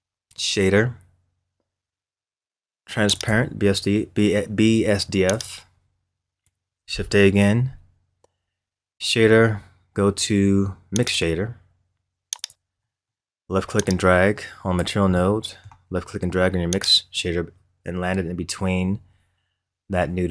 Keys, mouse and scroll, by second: 6.9 shift+a, 12.8-13.8 middle drag, 13.8 click, 15.1-16.7 middle drag, 16.7 click.